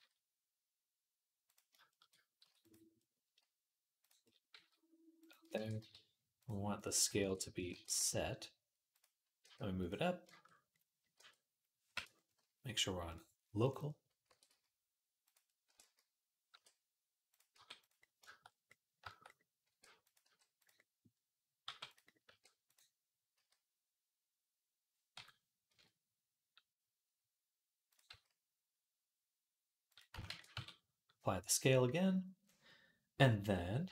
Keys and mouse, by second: 2.2 s, 2.6-3.8 middle drag, 3.8 click, 3.9-6.2 middle drag, 4.3 s, 5.3 ctrl+a, 6.2 click, 6.6 middle click, 7.1 middle click, 7.5 ctrl+a, 7.6-8.7 middle drag, 8.7 click, 8.8-12.9 middle drag, 9.2 g, 11.0 r, 12.9-15.1 drag, 14.1 r, 15.1-31.5 middle drag, 15.5 r, 17.3 g, 19.5 r, 20.0 g, 21.4 g, 22.1 r, 23.1 s, 27.9 s, 30.1 ctrl+a.